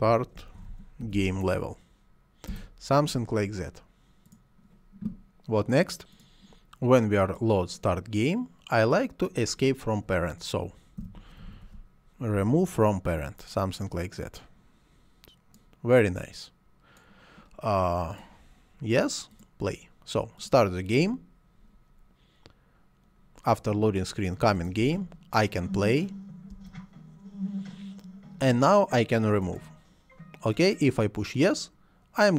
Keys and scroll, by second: 0.0-1.6 typing, 2.5 Return, 10.7-12.1 typing, 24.8 space, 26.5 space.